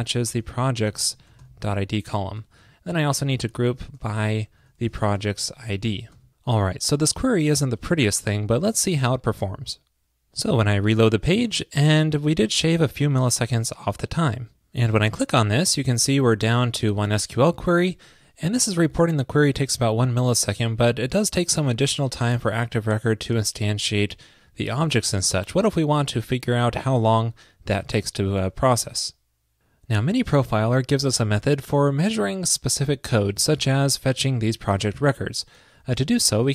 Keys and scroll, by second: 2.4 super+Right.